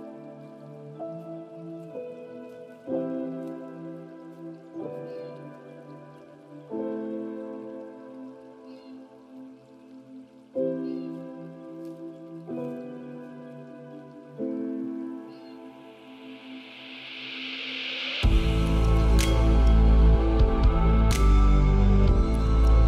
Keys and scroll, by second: 5.4 ctrl+a, 7.0 ctrl+space, 9.9 ctrl+z.